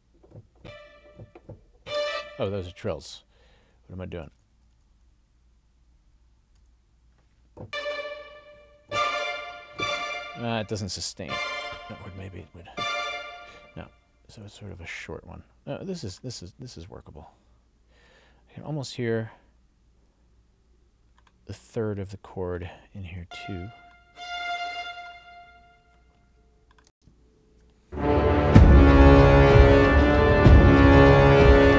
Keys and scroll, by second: 2.8 Up, 6.6 Up, 26.9 space.